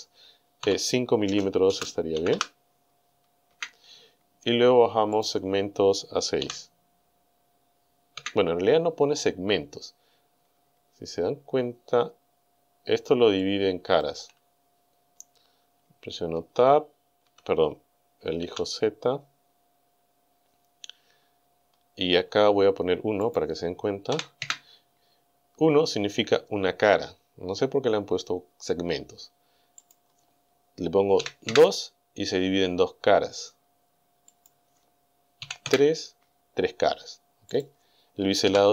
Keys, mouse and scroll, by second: 0.6 KP_5, 1.8 space, 2.2 m, 3.6 KP_Enter, 5.2 click, 6.5 KP_6, 8.2 KP_Enter, 10.8-11.2 scroll up 2, 13.4-14.2 shift+middle drag, 14.5-15.1 shift+scroll up 5, 15.1 scroll down 2, 16.4 Tab, 17.3 Tab, 18.5 z, 21.3-21.7 scroll up 2, 23.3 click, 24.1 KP_1, 24.5 KP_Enter, 29.8 click, 31.2 KP_2, 31.5 KP_Enter, 34.4 click, 35.6 KP_Enter, 37.6 click, 38.5 KP_6.